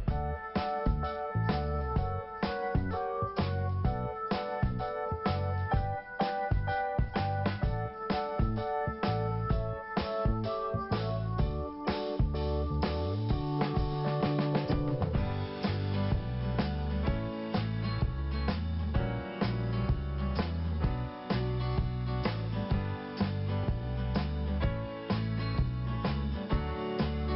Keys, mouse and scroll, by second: 2.0 click, 2.2 click, 3.3 click, 5.0 scroll down 1, 7.2 click, 9.4 scroll up 1, 10.5 click, 11.9 scroll up 1, 13.4 click, 16.3-17.0 scroll down 1, 17.6 click, 19.5 click, 19.5 click, 23.5 click, 23.5 click, 24.4 click, 25.9 click, 26.0 click, 26.0 click, 26.1 double click, 26.7 double click, 26.8 double click.